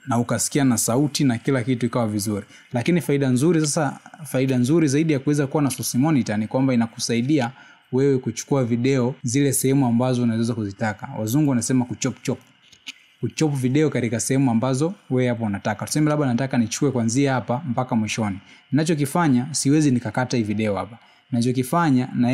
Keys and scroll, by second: 1.0 space, 5.8 space, 8.6 space, 9.8 space, 15.8 space, 18.8 space.